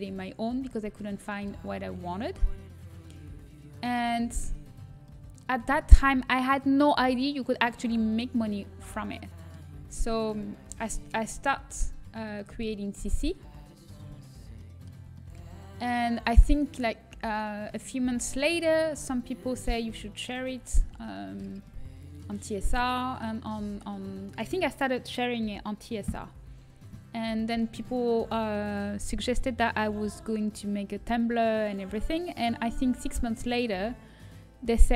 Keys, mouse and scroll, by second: 3.0-5.2 middle drag, 5.2-9.2 drag, 5.2-9.2 right drag, 9.2-11.1 middle drag, 11.1-12.1 drag, 11.1-13.8 right drag, 13.8 ctrl+z, 14.1-17.1 middle drag, 17.1-19.9 right drag, 19.9 click, 20.6 a.